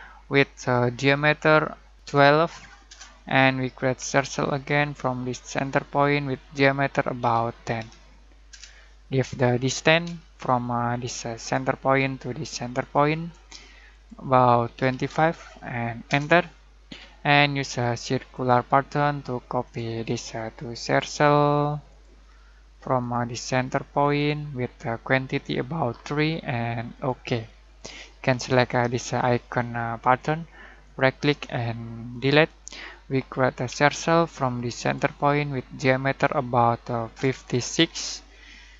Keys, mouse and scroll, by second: 1.7-2.5 typing, 2.8 Return, 4.0 c, 5.5 click, 7.2-7.7 typing, 8.5 Return, 10.0 d, 11.3 click, 14.7-15.0 typing, 16.0 Return, 18.3 click, 24.1 click, 26.9 click, 30.0 click, 30.8 right click, 33.6 c, 34.7 click, 37.1-37.7 typing.